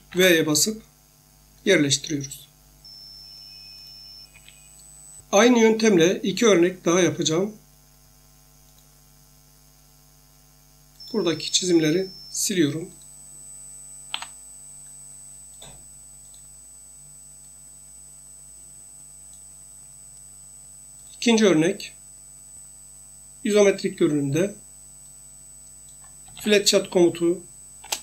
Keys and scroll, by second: 0.1 ctrl+v, 4.3 Escape, 14.1 Delete, 26.0-26.9 typing, 27.8 Return.